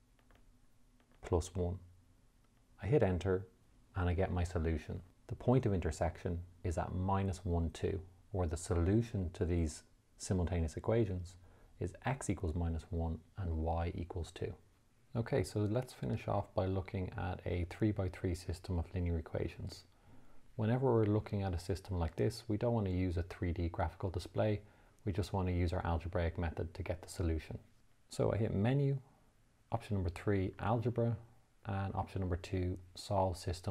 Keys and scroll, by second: 1.5 1, 3.3 Return, 28.8 Menu, 30.9 3.